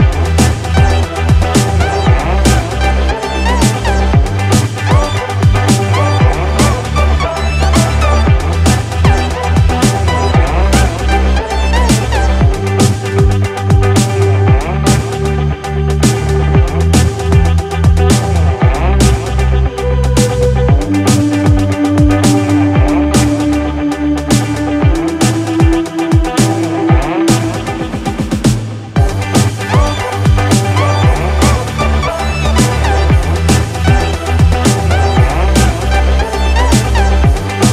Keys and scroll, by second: 2.8 ctrl+=, 21.4 ctrl+z.